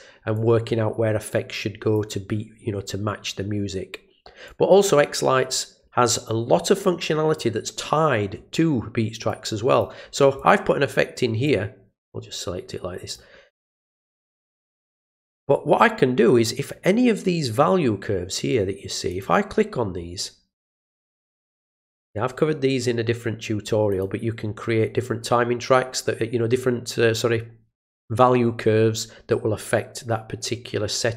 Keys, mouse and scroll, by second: 0.3-1.9 drag, 4.4-5.5 drag, 9.3 click, 10.3 click, 11.4-13.1 drag, 13.9 click, 19.1 click, 21.1 click, 21.5 click, 23.9 click.